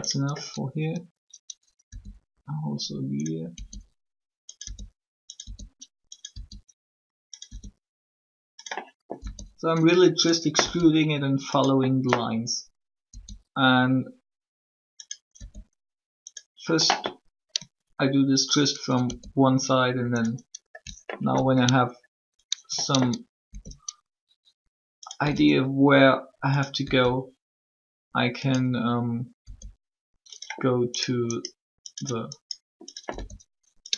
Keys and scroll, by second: 1.8 shift+e, 3.5 e, 9.1 e, 10.6 e, 13.0 e, 15.3 e, 19.0 shift+e, 25.2 e, 26.8 e, 29.3 e, 33.1 e.